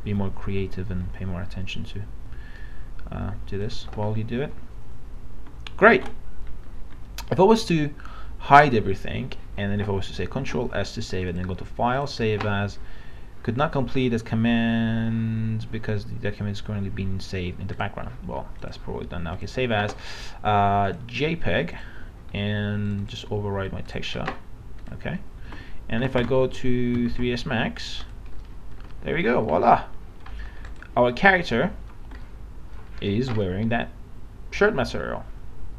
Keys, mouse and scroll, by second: 6.0 ctrl+d, 7.6 click, 10.4 ctrl+s, 11.3 click, 26.8 alt+Tab, 28.0 click, 28.4 middle click, 29.5 scroll down 1, 29.8 alt+middle click, 30.7 click, 33.4 alt+middle click.